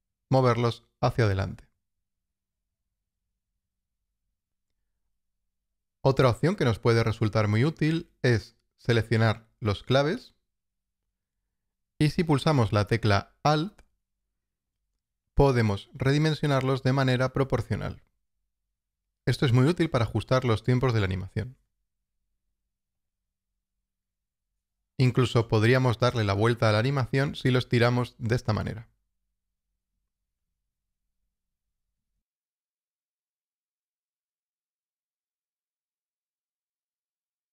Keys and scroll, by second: 2.7 alt+,.